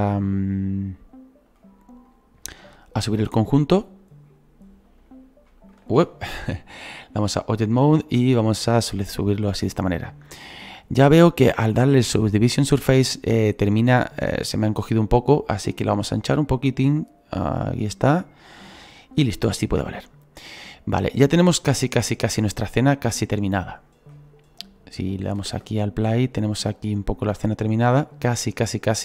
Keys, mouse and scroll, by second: 2.0 right click, 2.8-5.0 drag, 5.0 right click, 5.8 ctrl+z, 7.3-10.7 drag, 10.7-13.9 scroll down 3, 15.5-24.6 drag, 24.6 right click, 25.4 space.